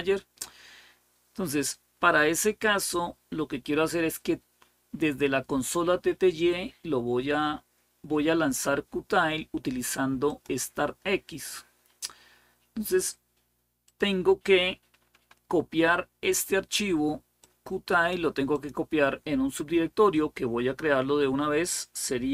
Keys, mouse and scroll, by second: 3.0-3.6 scroll down 1, 10.1 click, 11.7-13.0 scroll down 2, 13.7 click, 17.2-19.3 drag.